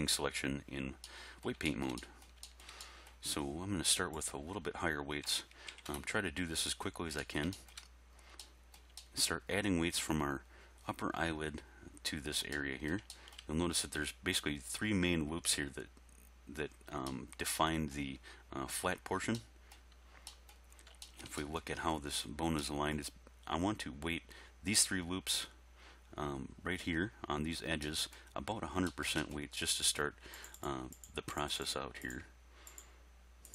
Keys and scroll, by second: 5.3 ., 5.7 3, 5.9 Return.